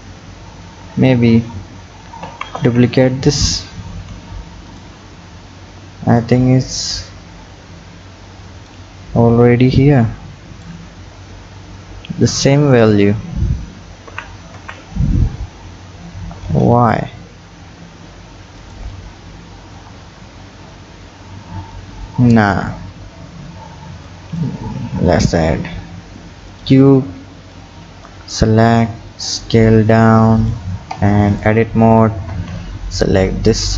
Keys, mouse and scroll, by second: 2.3 shift+d, 5.1 scroll up 5, 6.2-9.3 drag, 9.5-10.9 drag, 10.9-12.3 scroll up 4, 12.3 click, 13.0-14.1 scroll up 3, 14.1 g, 19.1-20.0 scroll down 10, 21.1 scroll up 2, 22.5 Delete, 22.9 scroll down 5, 24.1-24.6 drag, 24.6 shift+a, 27.5 click, 28.3-28.9 scroll up 3, 28.9 s, 31.0 Tab, 31.3 click, 32.3 b, 33.5-33.7 scroll up 5.